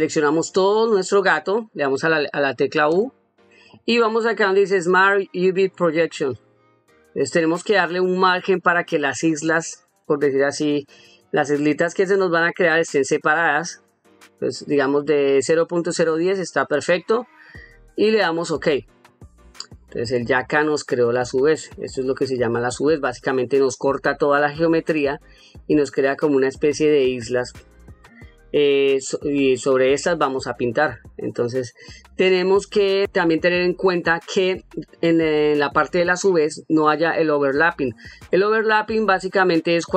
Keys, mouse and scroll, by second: 0.0 a, 20.6 ctrl+middle click, 21.6 ctrl+middle click, 22.4 ctrl+middle click, 23.2 ctrl+middle click, 25.2 ctrl+middle click, 32.7 middle click, 34.0 click, 39.1 ctrl+middle click.